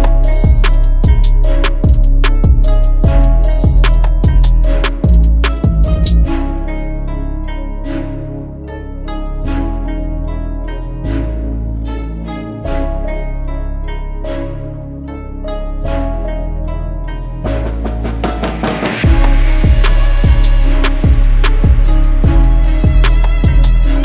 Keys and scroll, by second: 4.2 shift+F2, 5.3 F3, 5.8 Escape, 15.1 Delete.